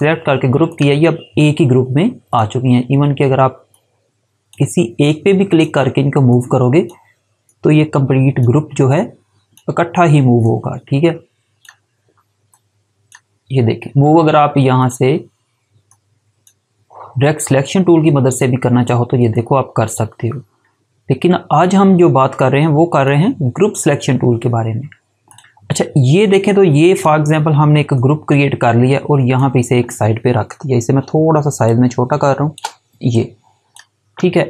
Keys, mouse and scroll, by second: 0.6 click, 5.1 click, 22.5 click, 25.2 click, 31.6 shift+click, 33.0 click.